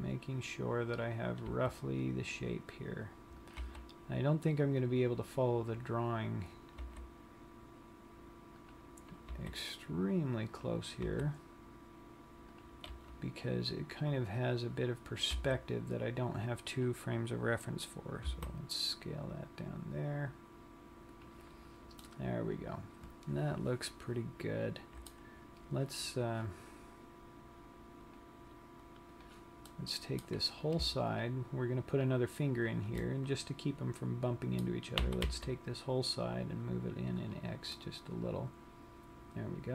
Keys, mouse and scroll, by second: 0.3 e, 1.7 click, 2.2 r, 3.9 click, 4.0 g, 5.2 click, 7.1 g, 9.3 click, 9.9 e, 11.0 click, 11.8 g, 12.9 click, 13.3 r, 15.1 click, 15.9 g, 17.4 click, 18.9 s, 21.8 click, 22.4 middle click, 28.1 click, 29.2 click, 30.0 middle click, 30.9 click, 31.5 shift+click, 31.6 shift+click, 32.2 click, 33.2 middle click, 34.2 shift+click, 35.2 g, 37.3 click, 38.0 middle click.